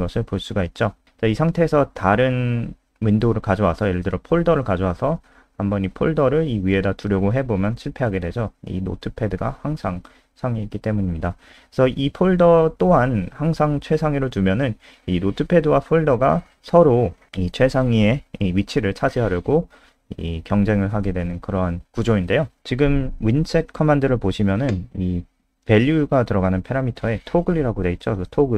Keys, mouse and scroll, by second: 2.3 F3, 3.8 click, 11.6 a, 16.7 click, 17.1 click.